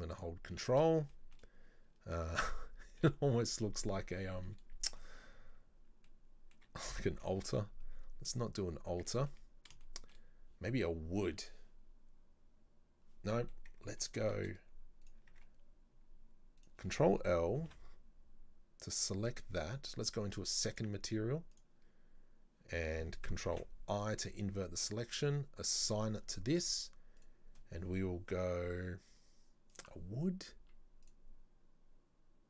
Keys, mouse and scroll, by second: 0.1 ctrl+click, 1.1-4.1 shift+middle drag, 4.9-5.2 scroll up 2, 6.1-7.5 middle drag, 7.5 Tab, 7.9 scroll up 1, 8.8 scroll down 2, 8.9 Tab, 9.1-11.2 middle drag, 11.2-13.3 drag, 13.3-15.1 middle drag, 15.1 right click, 15.3 Tab, 16.6 right click, 17.6 ctrl+l, 20.7 click, 21.5 click, 23.5 ctrl+i, 25.8 click, 27.2-30.2 drag, 31.0-32.4 drag.